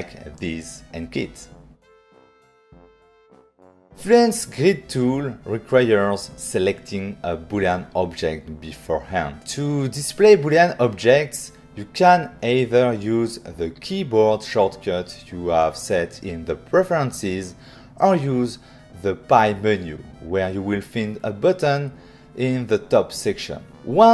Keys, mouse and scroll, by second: 1.6 click, 1.8 click, 2.0 click, 2.3 click, 3.4 click.